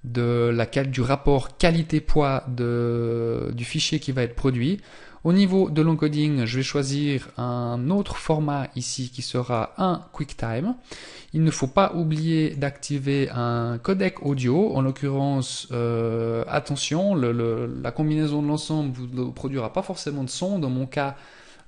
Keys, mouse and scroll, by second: 4.3 click, 5.1 scroll down 1, 5.7-6.7 scroll down 1, 6.7 click, 10.2 click.